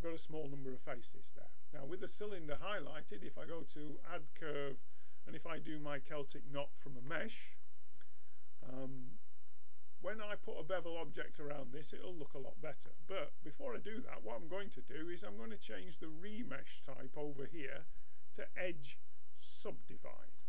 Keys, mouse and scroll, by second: 3.0-5.4 drag, 7.0-9.4 middle drag, 16.6-19.8 drag.